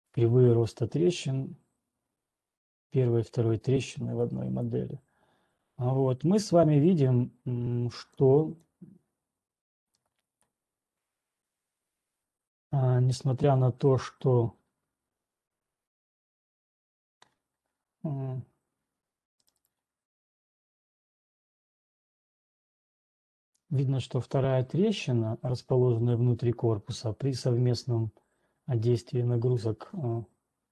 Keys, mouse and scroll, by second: 0.4 click, 4.4 scroll down 1, 8.9 click, 10.5 click, 20.0 right click, 20.5-20.9 scroll, 22.5 scroll.